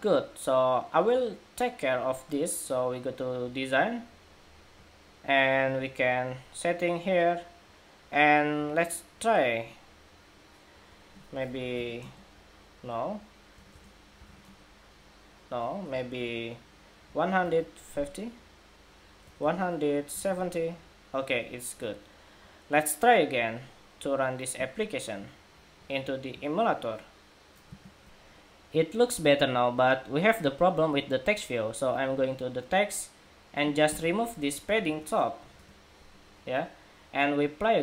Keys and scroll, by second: 27.7 shift+super+2.